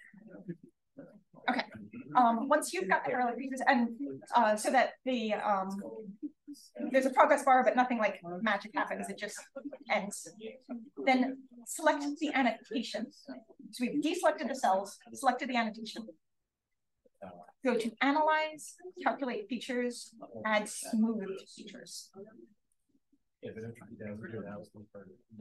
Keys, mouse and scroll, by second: 0.6 click, 11.6-12.7 drag.